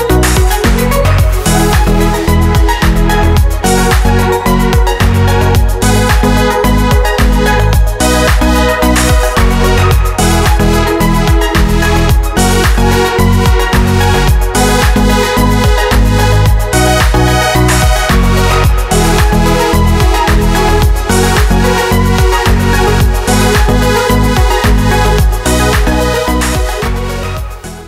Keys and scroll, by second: 0.0 super+d, 14.1 d.